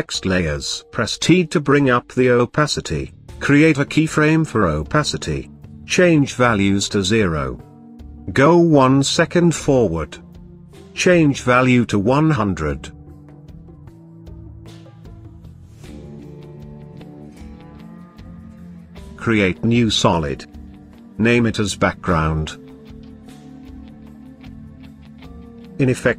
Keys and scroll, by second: 0.5 t.